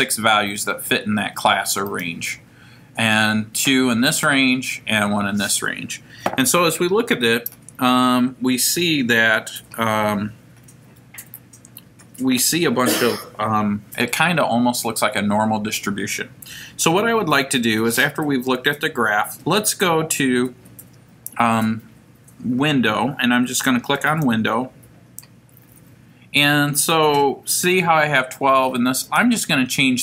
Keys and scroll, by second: 29.2 Down.